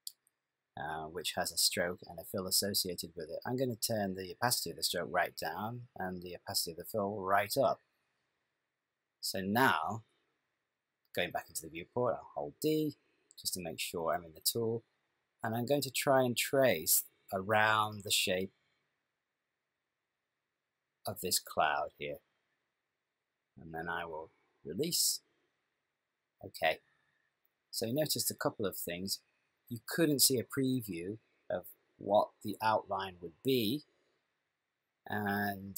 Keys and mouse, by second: 4.0 click, 6.5 click, 12.5 d, 12.8 click.